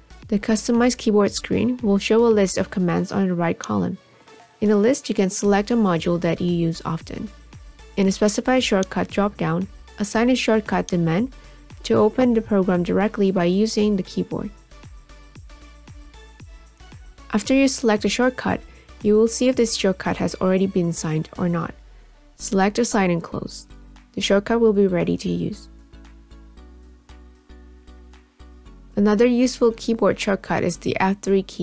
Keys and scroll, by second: 24.0 ctrl+a, 30.8 F3.